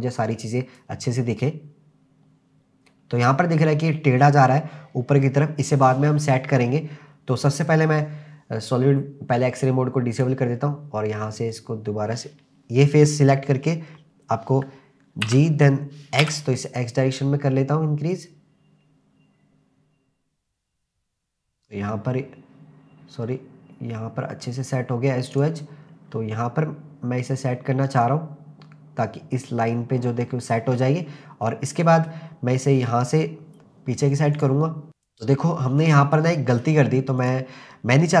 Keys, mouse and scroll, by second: 0.3 click, 1.1-2.9 scroll up 3, 2.9-3.3 scroll down 1, 6.7-10.1 scroll down 3, 10.1 click, 10.5-11.5 scroll down 2, 11.5 click, 15.3 g, 16.2 x, 25.4 click, 25.8-27.0 scroll up 4, 27.0-28.4 scroll down 2, 30.1 w, 30.8-31.5 scroll down 4, 31.5 middle click, 32.5-34.1 scroll down 2, 34.1 scroll down 1, 34.3 click, 35.3 middle click, 36.6-37.2 scroll up 1, 37.2 click.